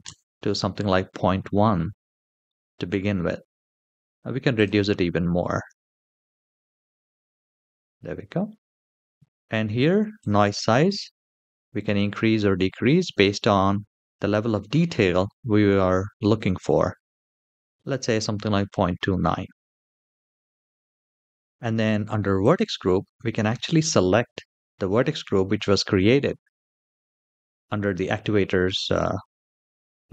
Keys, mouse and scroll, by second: 1.2-1.9 scroll up 1, 1.9 scroll up 2, 2.2-2.5 shift+middle drag, 2.8 middle click, 4.3-6.3 drag, 7.5 middle click, 9.9-16.9 drag, 18.4-19.5 middle drag, 20.3-21.4 scroll down 2, 22.1-30.1 drag.